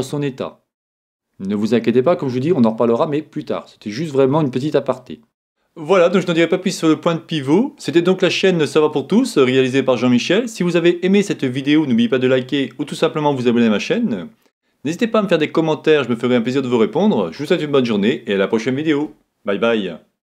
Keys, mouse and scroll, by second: 4.4-5.0 scroll down 1, 5.0-20.3 middle drag.